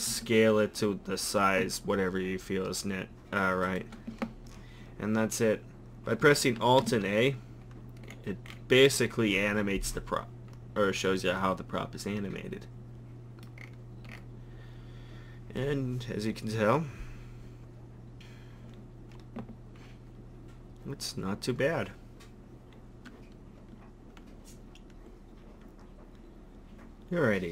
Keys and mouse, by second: 0.1 s, 6.8 alt+a, 11.4-13.1 middle drag.